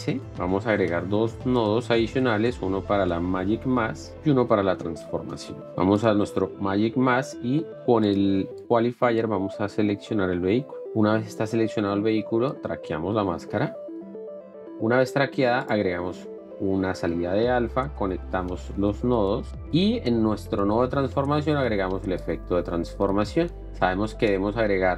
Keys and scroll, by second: 0.4 Return, 1.4 alt+s, 2.4 F2, 3.0 n, 3.4 BackSpace, 3.6 m, 4.4 F2, 4.7-5.7 typing.